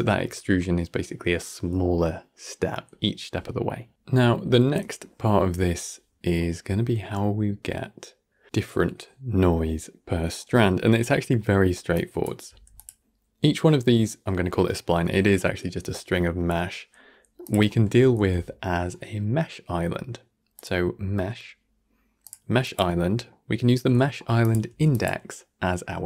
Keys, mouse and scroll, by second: 6.3-8.4 middle drag, 9.9-11.8 middle drag, 11.8-13.4 drag, 14.3-14.7 middle drag, 14.7 scroll up 1, 15.0-17.3 shift+middle drag, 17.3-18.0 drag, 18.0 shift+a, 23.0-24.3 middle drag, 24.3-26.0 drag.